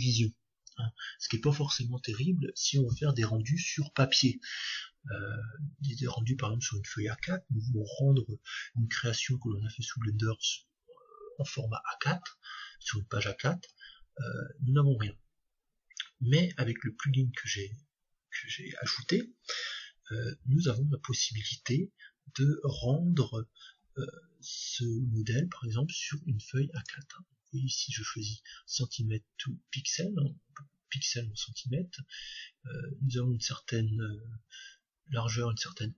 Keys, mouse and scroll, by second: 12.7-19.8 middle drag, 26.8-28.6 drag.